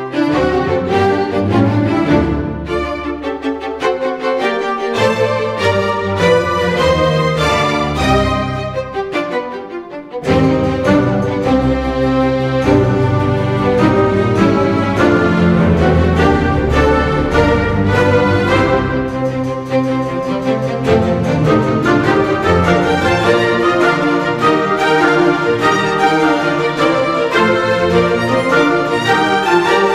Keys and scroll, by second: 3.6 Delete, 3.9 ctrl+d, 4.4 space, 9.1 Delete, 9.6 ctrl+d, 9.8 1, 10.2 ctrl+0, 15.0 1.